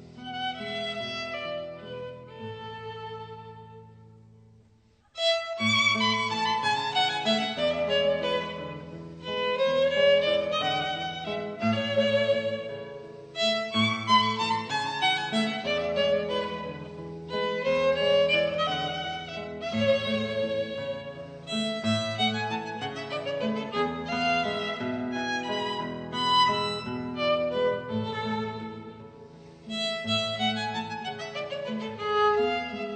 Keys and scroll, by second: 2.4 super+z, 2.7 super+z, 3.3 super+z, 3.6 super+z, 4.5 super+z, 5.2 super+z, 5.7 super+z, 5.9 super+z, 9.2 super+z, 10.7 super+z, 11.2 super+z, 11.7 super+z, 12.1 super+z, 12.4-13.6 typing, 13.8 Escape, 14.1 Escape, 17.1 b, 20.0 -, 20.7 Escape, 20.8 b, 22.1 b, 22.8 b.